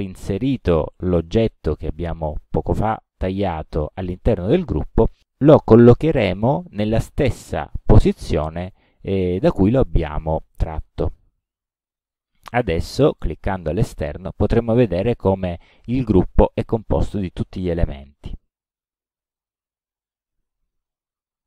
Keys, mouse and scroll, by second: 12.6 click, 13.0 click, 14.6 click, 15.3-17.8 drag.